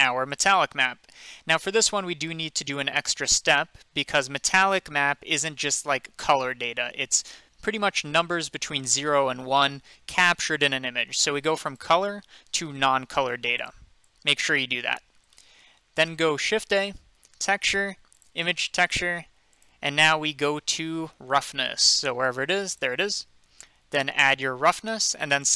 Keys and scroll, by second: 16.5 a.